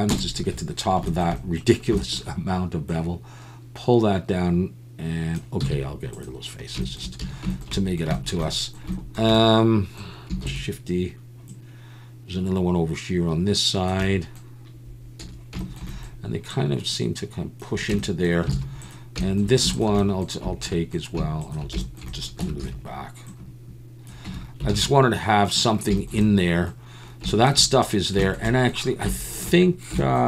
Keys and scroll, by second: 0.5 ctrl+KP_Add, 1.3 ctrl+KP_Add, 5.6 x, 7.2 a, 10.4 shift+d, 15.2 a, 17.9 Tab, 18.5 alt+a, 22.4 Tab, 22.6 a, 24.2 Tab, 24.7 alt+a, 24.8 Tab.